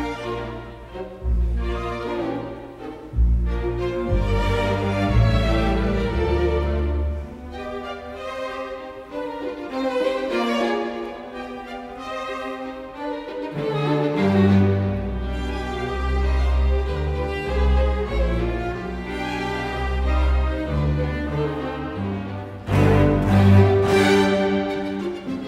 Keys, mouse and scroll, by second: 2.1 space, 5.0 space, 8.0 space, 16.4 space, 18.2 space, 20.8 space, 23.2 space, 25.0 space.